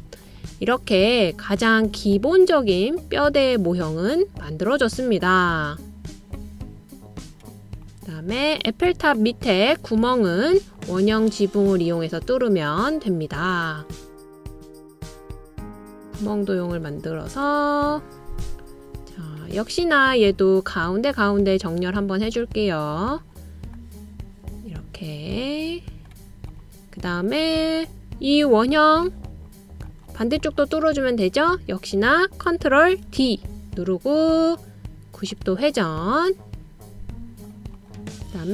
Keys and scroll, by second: 33.8 super+o.